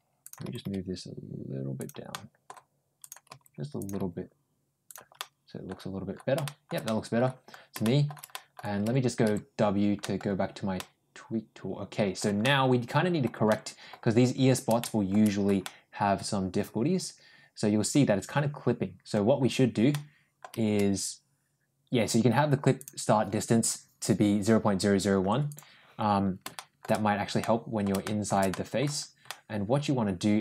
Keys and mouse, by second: 0.1 click, 0.3 g, 2.0 middle click, 2.8 click, 3.1 g, 3.6 click, 3.8 g, 5.0 middle click, 6.3 middle click, 6.7 middle click, 7.7 shift+middle click, 8.1 middle click, 8.7 w, 9.1 w, 9.8 middle click, 10.6-12.0 middle drag, 12.3 middle click, 13.3 middle click, 14.6 shift+middle click, 15.5-19.0 middle drag, 19.7 middle click, 22.6-25.4 drag, 26.4 shift+middle click, 27.2 middle click, 27.9 shift+middle click, 28.3 middle click, 29.1-30.4 middle drag.